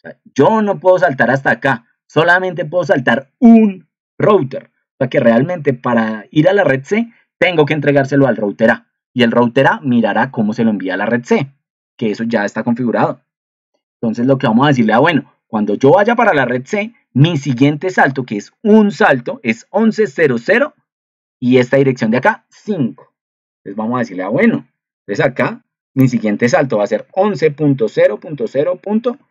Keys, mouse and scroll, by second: 24.0 alt+Tab.